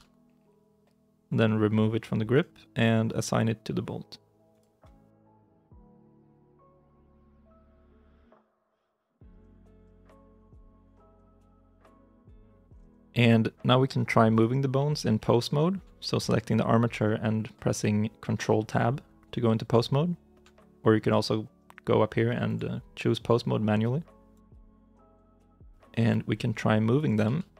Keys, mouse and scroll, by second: 4.9-5.5 scroll down 1, 5.5 right click, 8.4 right click, 9.4-9.8 scroll down 1, 9.8 g, 11.2 ctrl+z, 11.6 right click, 12.9 right click, 14.2 right click, 25.1 right click, 25.4-25.8 scroll up 1, 25.8 g, 27.1 ctrl+z.